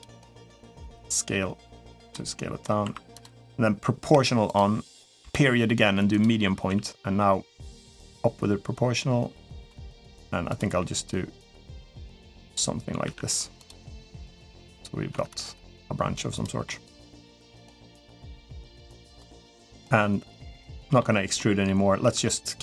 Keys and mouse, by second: 0.3 s, 1.9 middle click, 2.6 1, 2.9 click, 3.9 0, 4.2 click, 5.0 ., 6.5 g, 9.6 middle click, 10.5 g, 12.8 r, 13.6 g, 14.5 click, 14.9 g, 16.4 middle click, 17.2 click, 17.5 middle click, 19.1 g, 20.5 middle click, 21.1 middle click, 21.8 Tab, 22.0 middle click.